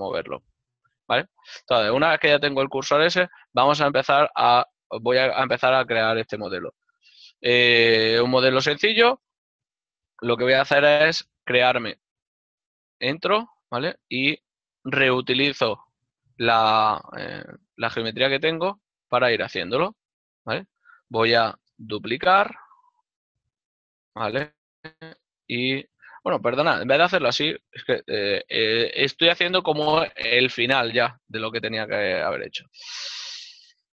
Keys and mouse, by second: 1.4 right click, 12.1 Tab, 13.7 click, 13.9 ctrl+Tab, 14.8 click, 14.9 right click, 18.2 shift+middle click, 22.0 shift+d, 25.3 right click, 26.5 ctrl+z, 28.3 ctrl+middle click, 31.3 ctrl+middle click.